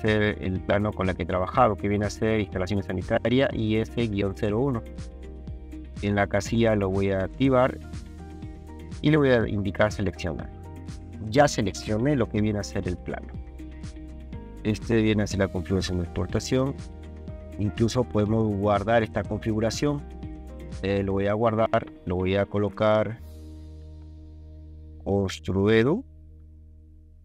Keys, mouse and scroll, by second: 6.7 click, 9.9 click, 18.9 click, 20.5 click, 24.2-25.9 typing.